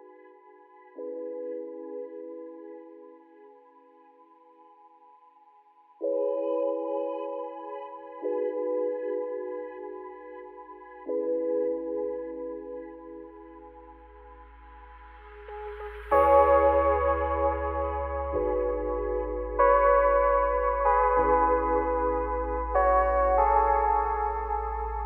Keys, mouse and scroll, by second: 0.1 shift+middle click, 0.9 ctrl+r, 4.6 alt+shift+click, 5.1 alt+shift+click, 5.9 ctrl+z, 6.4 alt+shift+click, 6.8 alt+shift+click, 7.3 alt+shift+click, 8.4 alt+shift+click, 9.1 alt+shift+click, 10.0 ctrl+z, 10.4 alt+shift+click, 11.3 ctrl+z, 11.9 alt+shift+click, 12.6 alt+shift+click, 13.3 alt+shift+click, 13.9 alt+shift+click, 14.4-15.3 scroll up 2, 15.3 ctrl+b, 18.2 alt+e, 21.4 Tab, 21.6 scroll down 3, 21.7-22.9 middle drag, 22.9 click, 23.1-23.5 scroll down 4, 23.5-25.0 middle drag.